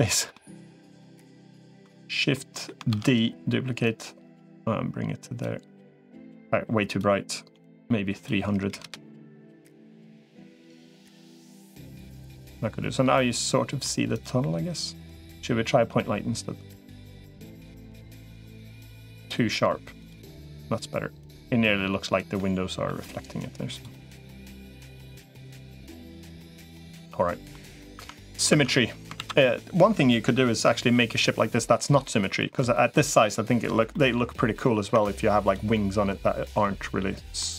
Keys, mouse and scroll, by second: 0.7 middle click, 1.2 middle click, 2.2 middle click, 3.1 shift+d, 3.7-5.3 drag, 6.9-8.9 drag, 9.8 middle click, 11.1 middle click, 12.4-13.7 middle drag, 17.5 middle click, 21.1-22.1 drag, 22.2 middle click, 24.9-27.3 middle drag, 27.9 Tab, 28.3 Tab, 29.1 ctrl+s, 30.8-32.4 middle drag, 33.7 middle click, 34.7 Tab, 35.6-36.6 middle drag, 37.2-37.5 middle drag.